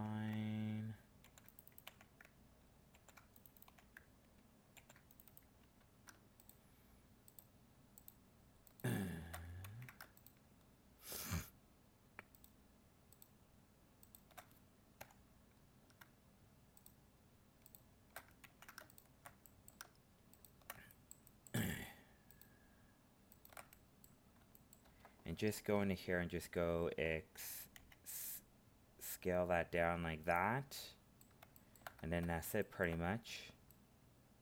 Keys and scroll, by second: 9.6 ctrl+z, 18.4 ctrl+z.